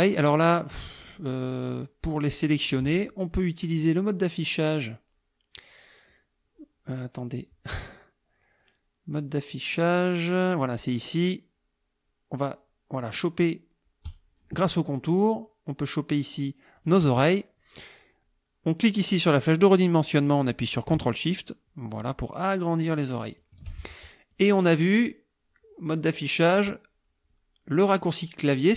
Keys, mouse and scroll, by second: 0.7 click, 2.1-2.7 drag, 3.7 click, 14.1 click, 16.8 click, 19.1-23.6 drag, 24.3 click.